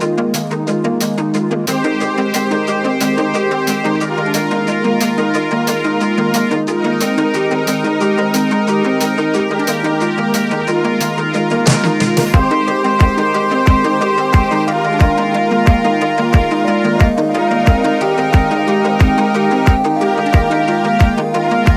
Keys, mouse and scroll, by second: 1.7-2.2 scroll up 1, 2.2-2.5 shift+middle drag, 2.5-3.3 scroll up 2, 3.3 g, 6.4-7.9 middle drag, 7.9 click, 8.4-9.2 scroll up 1, 9.2 alt+click, 10.0 alt+shift+click, 11.1 ctrl+b, 18.7-20.4 middle drag, 20.4-21.7 drag.